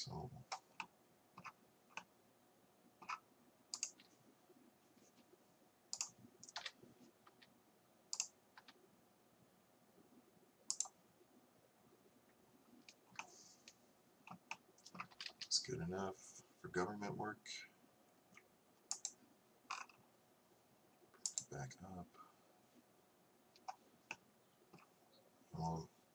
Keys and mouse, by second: 4.1-6.6 right drag, 6.6 KP_1, 7.3 r, 15.2 a, 15.3 a, 19.0-24.3 drag.